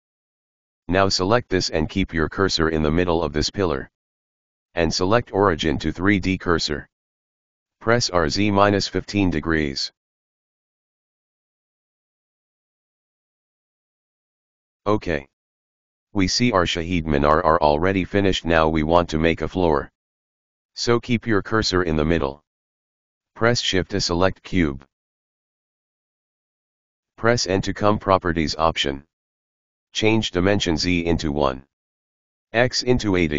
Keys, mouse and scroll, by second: 0.1 click, 3.7 click, 5.1-8.0 drag, 8.6 r, 12.4-13.4 middle drag, 13.4 KP_1, 14.4-15.7 scroll up 3, 15.7 right click, 16.3-17.3 middle drag, 17.3 KP_1, 18.1-19.4 scroll down 2, 19.7 click, 23.7 shift+a, 24.8 s, 26.4 s, 27.5 n, 28.5-31.5 drag, 31.7-33.3 drag.